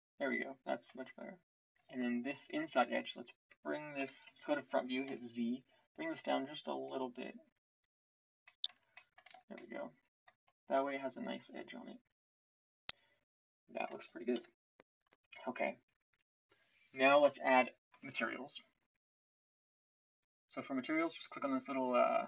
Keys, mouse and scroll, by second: 4.0 KP_1, 5.0 z, 7.2-8.6 drag, 8.6 Tab, 9.3 z, 14.3 KP_1.